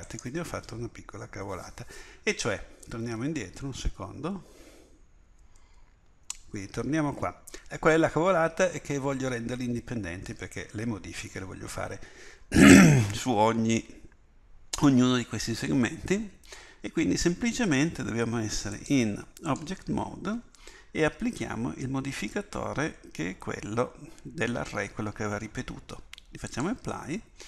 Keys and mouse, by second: 3.1 ctrl+z, 3.5 ctrl+z, 3.7 ctrl+z, 4.2 ctrl+z, 4.6 ctrl+z, 5.4 ctrl+z, 5.6 ctrl+z, 19.2-20.9 drag, 26.5-27.4 drag.